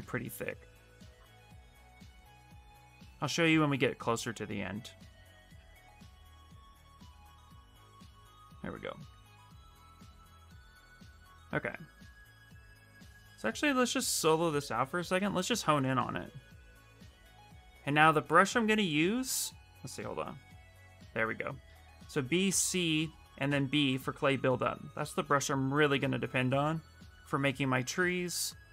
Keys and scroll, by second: 1.5 w, 2.9 q, 14.9 q, 20.0 b, 20.4 c, 21.7-23.2 typing, 26.3 s.